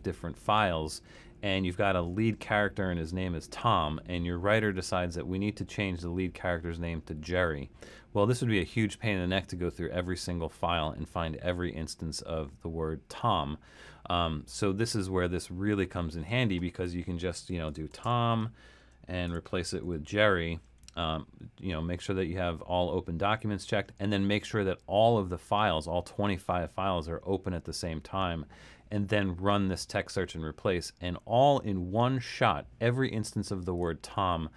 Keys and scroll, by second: 17.5-20.6 typing.